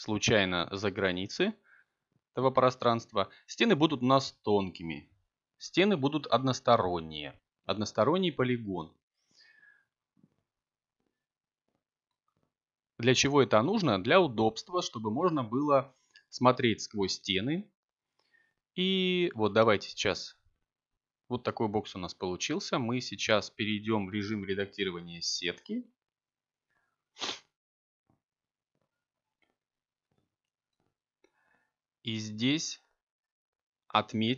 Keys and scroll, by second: 3.3 BackSpace, 7.8 2, 11.3 ., 12.4 7, 14.1 Return, 26.3 Tab.